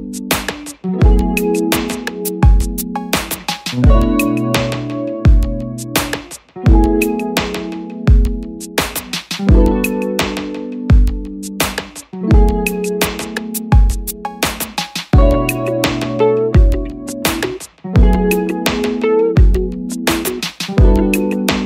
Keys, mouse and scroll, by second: 3.6 double click.